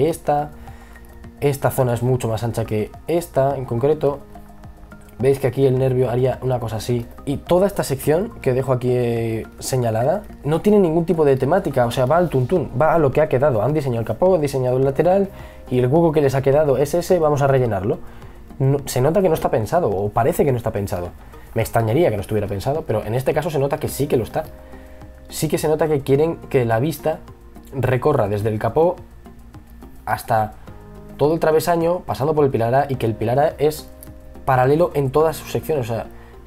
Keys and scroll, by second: 19.7 e, 21.0 b, 21.4 e, 22.4 b.